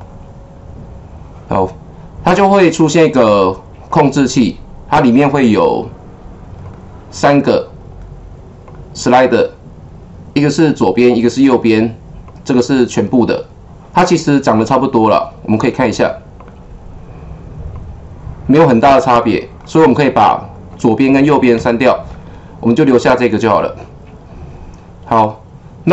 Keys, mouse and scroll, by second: 0.0 click, 3.8 click, 4.9 click, 6.6 click, 8.6 click, 10.8 click, 12.2 click, 14.5 click, 16.3 click, 17.7 click, 19.6 click.